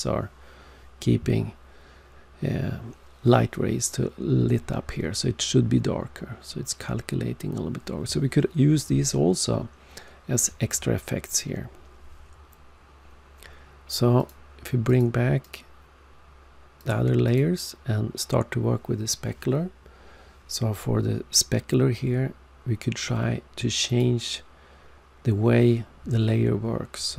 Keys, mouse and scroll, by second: 14.2 click, 14.8 click, 15.4 click, 17.2 click, 23.8 click.